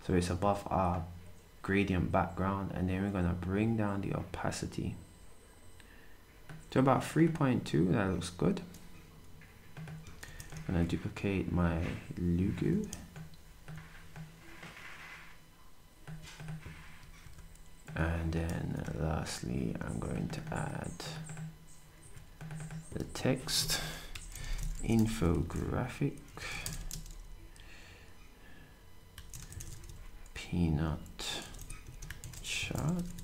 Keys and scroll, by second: 18.5 d, 22.0 s, 24.2-26.3 typing, 28.9-33.2 typing.